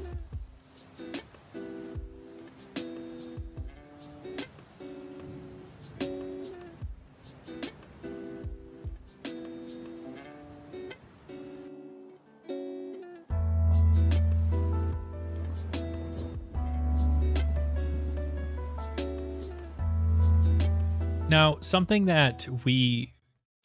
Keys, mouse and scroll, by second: 0.0 shift+middle click, 0.0 middle click, 0.1 middle click, 0.3 shift+middle click, 0.4 shift+middle click, 0.7 middle click, 1.0 middle click, 1.1 shift+middle click, 1.9 middle click, 2.0 alt+middle click, 2.2 middle click, 2.3 middle click, 2.5 shift+middle click, 2.6 click, 2.7 middle click, 2.7 shift+middle click, 2.8 click, 3.0 middle click, 3.5 middle click, 3.7-4.4 scroll, 4.5 middle click, 5.0 alt+right click, 5.2 alt+right click, 5.3 click, 5.4 click, 6.0 click, 6.3 click, 6.8 middle click, 6.9 shift+middle click, 7.2 h, 7.4 click, 7.9 click, 8.7 click, 9.1 click, 9.6 middle click, 9.7 alt+middle click, 9.9 middle click, 10.1 shift+middle click, 10.3 middle click, 10.4 shift+middle click, 10.4 shift+middle click, 10.5 middle click, 11.5 click, 11.6 click, 11.9 click, 12.0 click, 12.1 click, 12.5 click, 12.7 click, 13.0 click, 13.4 ctrl+right click, 14.2 click, 14.3 click, 14.4 click, 14.6 click, 15.4 alt+right click, 15.6 alt+right click, 15.8 click, 16.0 click, 16.3 click, 16.5 alt+right click, 16.7 scroll, 17.2 middle click, 17.4 middle click, 17.5 middle click, 17.6 middle click, 17.7 shift+middle click, 17.7 shift+middle click, 17.8 middle click, 18.0 middle click, 18.3 shift+middle click, 18.5 shift+middle click, 19.5 shift+middle click, 19.5 middle click, 19.7 shift+middle click, 19.8 shift+middle click, 20.1 click, 20.3 click, 20.5 middle click, 20.6 shift+middle click, 20.7 middle click.